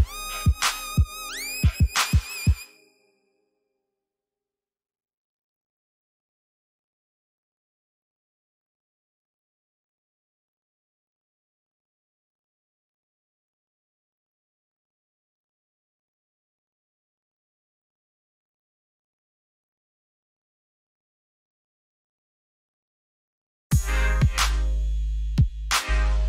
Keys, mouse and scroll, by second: 1.3 ctrl+z, 2.0 click, 4.2 click, 10.0 Escape, 12.0 ctrl+Num_Lock, 12.1 r, 13.8 click, 23.3 v, 24.0-24.9 scroll down 3, 24.9 click.